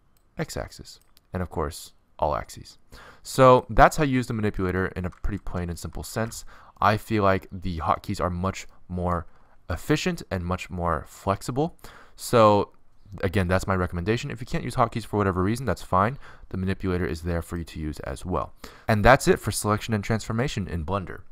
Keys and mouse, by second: 0.0 click, 0.1 middle click, 2.0 click, 2.2 alt+s, 5.6 alt+s, 10.0 middle click, 12.1-13.0 middle drag, 13.0-14.0 drag, 14.0-19.0 middle drag.